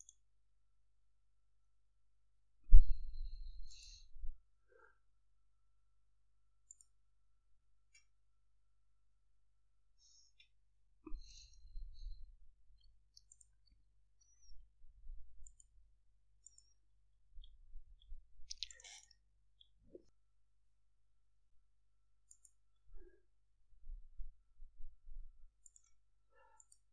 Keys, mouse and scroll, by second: 3.9 click, 6.9 click, 12.3 F8, 15.7 click, 16.7 click, 18.9 click, 22.5 click, 25.8 click, 26.8 click.